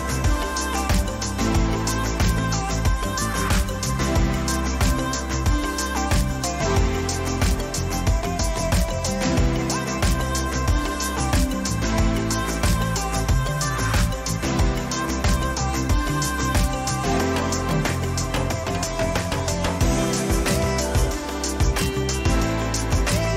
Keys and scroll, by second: 14.3 ctrl+-, 20.3 ctrl+-, 21.1 ctrl+t.